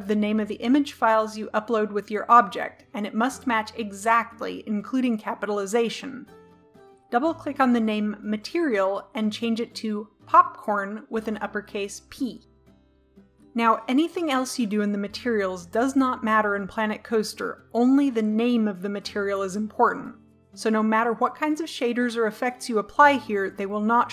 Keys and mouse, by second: 0.7-24.1 drag.